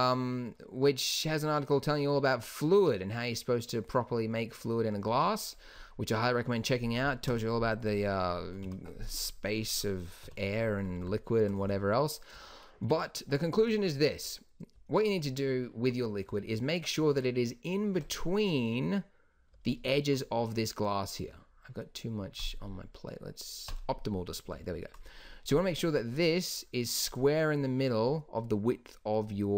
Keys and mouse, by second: 0.3 middle click, 7.4 KP_1, 7.6 KP_0, 8.8 KP_1, 10.4 KP_5, 19.8-20.3 drag, 25.2-28.9 drag.